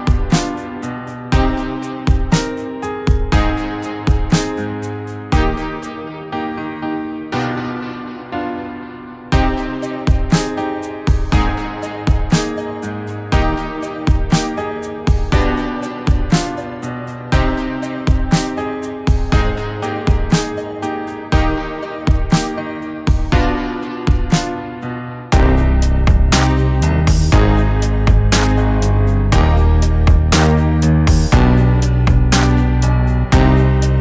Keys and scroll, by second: 5.3-5.9 ], 6.3 ctrl+z, 6.5 ], 8.1 ctrl+z, 11.0 ctrl+z, 12.6 ctrl+z, 16.9 ], 17.2 ], 17.3 ctrl+z, 20.6-21.8 typing, 22.9-23.7 typing, 27.8-28.3 ], 28.0 ], 30.0 [, 30.0 [, 30.5 [.